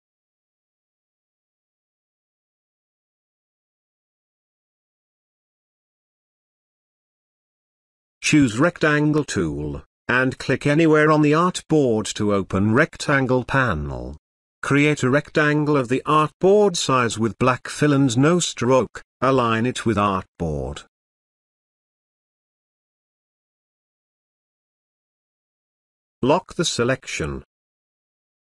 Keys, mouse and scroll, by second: 1.3-5.8 drag, 26.9 click.